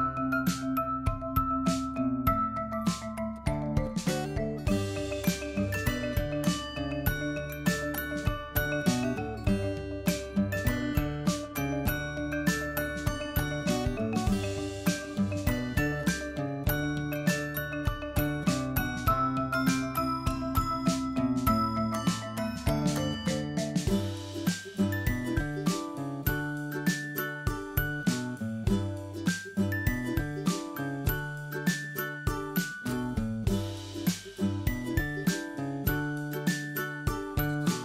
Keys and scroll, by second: 1.5 ctrl+Left, 9.7 ctrl+Right, 17.2 ctrl+Right, 18.6 ctrl+Right, 21.0 ctrl+Left, 21.9 ctrl+Left, 24.3 ctrl+Left, 27.0 ctrl+Left, 30.0 ctrl+Left, 32.2 ctrl+Left, 34.8 ctrl+Right, 36.1 ctrl+Right, 37.5 ctrl+Right.